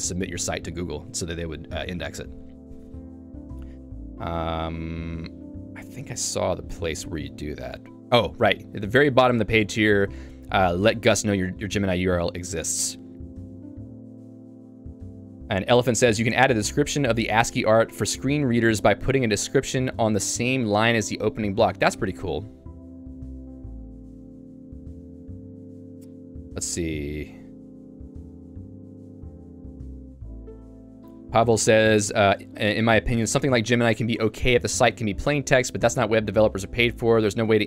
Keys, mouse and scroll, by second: 5.1 k, 7.1 j, 9.8-10.8 l, 12.5-13.8 typing.